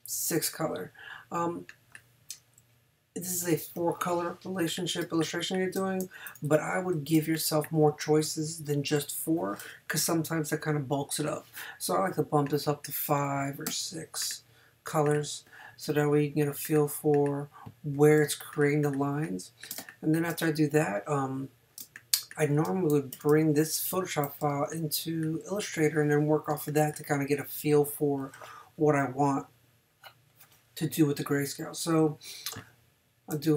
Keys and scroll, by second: 2.6 Down, 5.0 space, 6.0 super+space, 6.3 super+-, 7.1 super+space, 13.7 6, 18.2 space, 19.8 space, 21.8 space, 23.1 super+-, 24.5 super+space, 26.5 space.